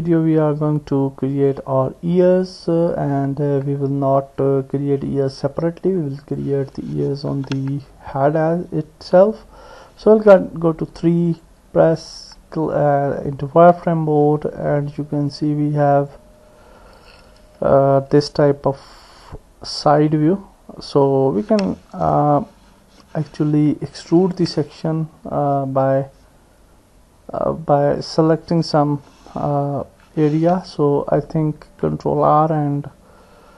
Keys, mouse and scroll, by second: 0.0 click, 2.4 click, 4.1-6.0 middle drag, 6.3 click, 7.4 Tab, 9.4 KP_3, 11.4 click, 15.7 click, 24.3 ctrl+r.